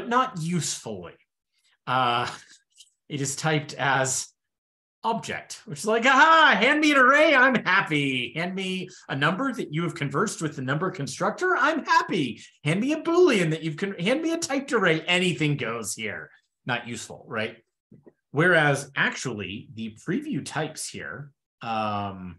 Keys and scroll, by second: 19.2 super+p.